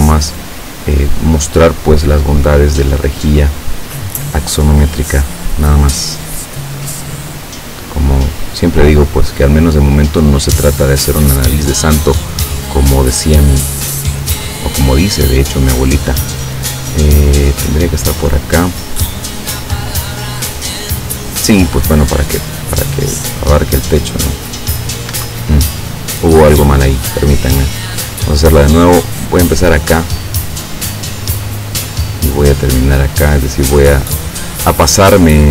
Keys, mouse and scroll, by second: 2.7 click, 6.2 click, 10.1 click, 21.5 click, 23.0 click, 25.1 Escape, 31.0 click, 35.2 click.